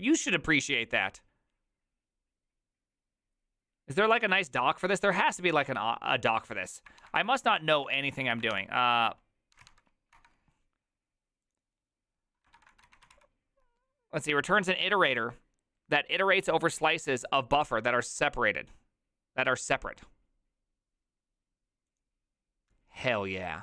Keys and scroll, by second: 7.0 alt+r, 7.2 Right, 7.3 Right, 7.5 Right, 7.7 Escape, 8.5 ctrl+f, 9.3-10.6 typing, 12.5-13.6 typing.